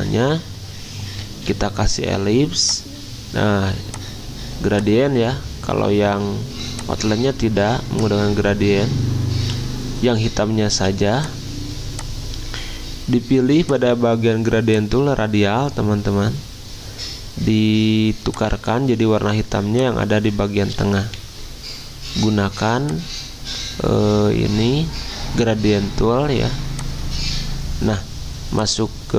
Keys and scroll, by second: 1.5 d, 10.7 z, 21.0 g.